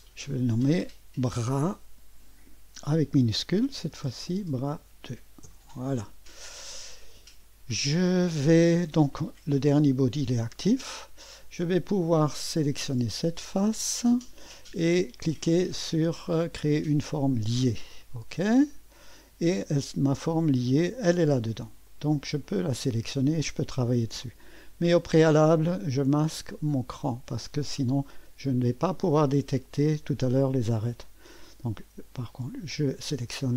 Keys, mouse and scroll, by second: 0.0 click, 1.5 F2, 2.5-6.2 typing, 9.1 click, 13.0 click, 16.9 click, 18.7 click, 20.4 click, 21.8 click, 22.5 click, 26.0 click, 26.8 space, 32.5 click.